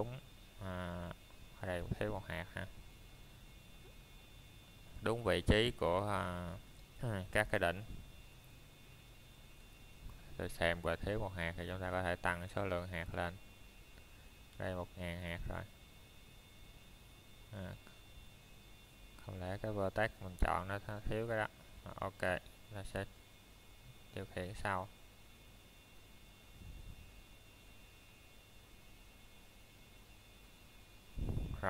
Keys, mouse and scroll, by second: 0.7 click, 4.7 click, 8.4 middle click, 10.1-10.8 scroll up 1, 10.8 middle click, 11.7 scroll down 1, 12.0 middle click, 12.7-13.4 scroll up 1, 13.8 middle click, 16.0 scroll up 1, 16.3 middle click, 19.2 scroll down 1, 19.7 middle click, 20.1-20.6 scroll up 1, 20.6 middle click, 21.0 scroll down 1, 21.3 shift+middle click, 23.0 shift+middle click, 25.5 click.